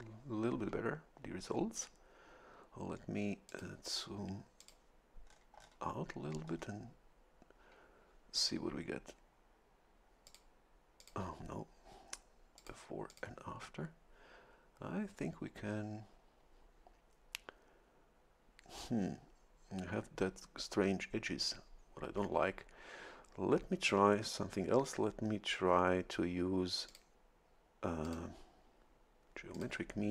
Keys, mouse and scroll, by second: 3.5 click, 4.6 click, 5.3 scroll down 1, 6.4 scroll down 1, 10.2 click, 11.0 click, 12.6 click, 13.1 click, 26.9 click, 28.0 click, 29.5 click.